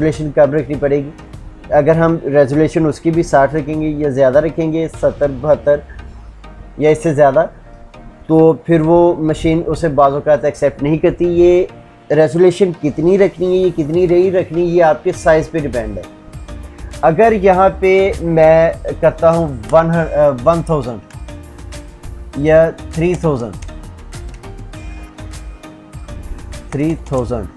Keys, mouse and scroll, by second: 21.0 Tab, 21.6 shift+Tab, 23.5 Tab, 24.2 shift+Tab.